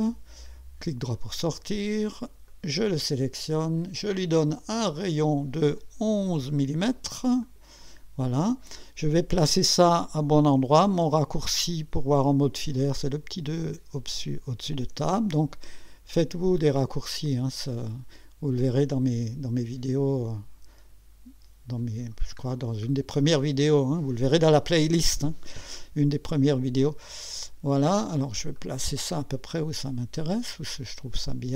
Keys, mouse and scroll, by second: 0.8 right click, 2.5 click, 5.0 click, 6.2 KP_1, 7.4 click, 8.3 scroll up 1, 16.7-22.3 drag, 22.4 scroll down 1, 23.3-24.4 right drag, 28.6-31.5 drag.